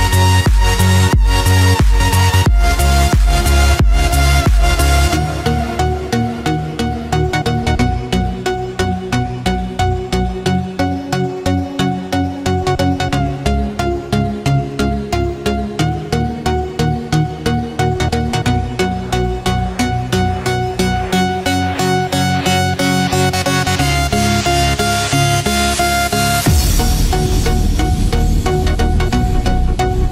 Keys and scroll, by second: 5.7 ctrl+-, 6.6 ctrl+0, 7.8 ctrl+=, 16.8 ctrl+=, 17.5 ctrl+space, 24.9 ctrl+-.